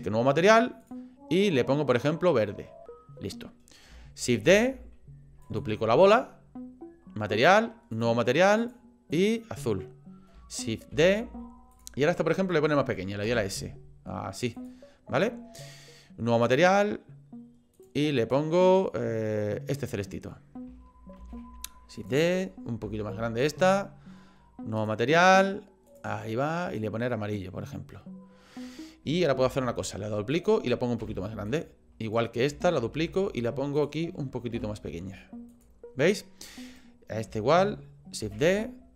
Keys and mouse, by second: 0.8 click, 4.5 shift+d, 7.9 click, 10.9 shift+d, 13.2 s, 16.4 click, 17.8 click, 21.2 shift+d, 22.8 s, 24.8 click, 25.9 click, 29.4 shift+d, 31.0 s, 32.0 click, 32.9 shift+d, 34.5 s, 36.7 click, 38.2 shift+d.